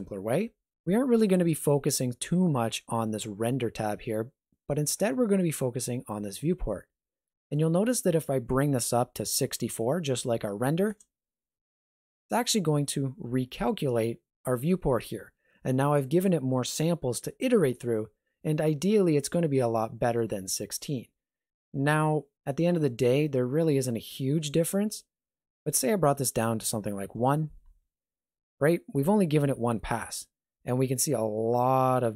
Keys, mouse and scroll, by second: 7.6 click, 25.7 click.